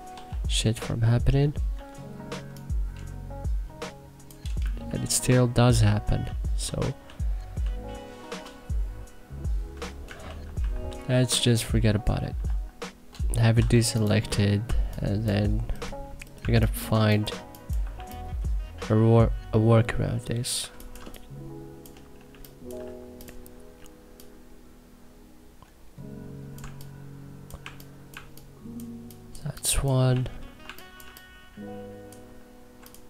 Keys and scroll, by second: 1.4 t, 4.6 ctrl+z, 9.9 ctrl+z, 13.3 e, 14.3 2, 16.1 1, 17.7 3, 20.3 1, 20.6 3, 21.7 1, 22.0 3, 26.3 3, 27.8 1, 29.8 3, 30.3 1, 30.7 3.